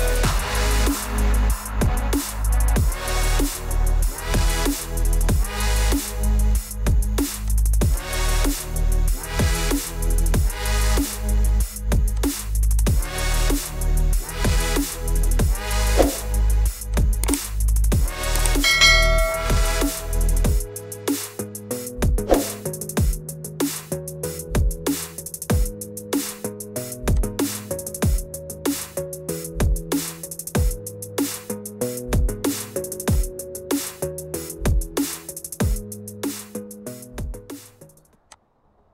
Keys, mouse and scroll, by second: 7.5 click, 8.0 click, 11.1 click, 12.2 click, 14.2 click, 17.1 click, 20.1 click, 22.4 click, 25.9 middle click, 28.8 click, 30.0 click, 33.2 click, 38.4 click.